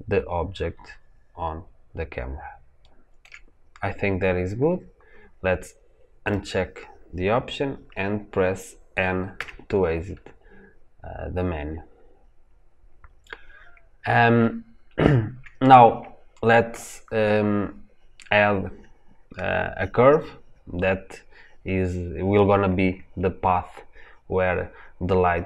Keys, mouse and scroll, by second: 6.1-9.2 drag, 9.2 n, 10.5-14.7 scroll up 2.